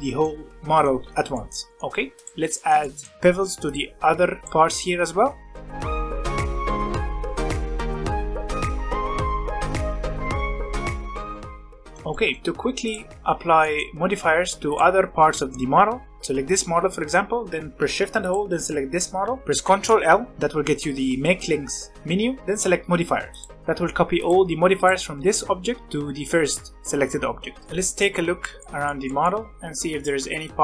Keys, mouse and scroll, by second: 1.6 scroll up 1, 1.7-2.1 middle drag, 2.1 click, 2.5-3.6 shift+middle drag, 3.6 click, 4.6 click, 5.4 click, 5.6 shift+middle click, 5.6 scroll up 2, 5.8 shift+middle click, 6.1 shift+middle click, 6.5 shift+click, 6.9 shift+middle click, 7.1 shift+click, 7.6 click, 7.9 middle drag, 8.1 scroll down 1, 8.3 middle drag, 8.3 drag, 8.4 shift+middle drag, 8.5 scroll up 1, 8.7 shift+middle click, 8.9 click, 9.7 click, 9.9 shift+click, 10.3 middle click, 10.8 middle click, 11.0 click, 11.2 middle click, 11.4 alt+a, 11.5-12.8 shift+middle drag, 12.8 click, 13.0 shift+middle click, 13.2 alt+a, 13.5 shift+middle click, 13.9-14.6 scroll up 1, 14.6 click, 18.2 shift+click, 20.2 ctrl+l, 24.1 click, 24.7 click, 25.8 click, 27.6-30.6 shift+middle drag.